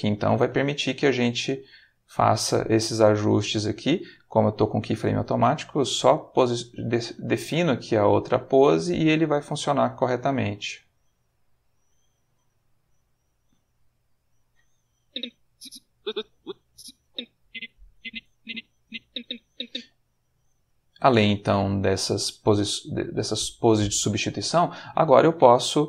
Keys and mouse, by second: 1.3-3.1 drag, 5.8 click, 7.2 click, 7.6 click, 8.5 click, 9.3 click, 10.1 click, 11.3 click, 13.5 click, 15.1-19.7 drag, 22.7 ctrl+middle click, 23.6 ctrl+shift+middle click, 25.3 click.